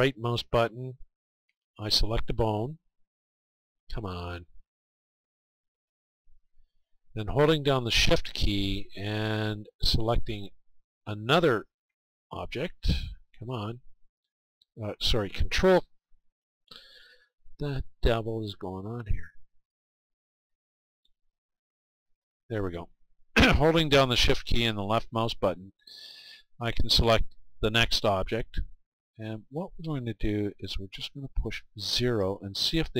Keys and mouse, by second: 0.5-5.5 right drag, 4.0-6.5 middle drag, 5.7 right click, 6.8-11.3 middle drag, 6.8-8.1 right drag, 11.3-13.3 right drag, 13.5-17.1 right drag, 17.1 middle click, 18.7 middle click, 20.1-23.7 right drag, 29.2-32.9 drag.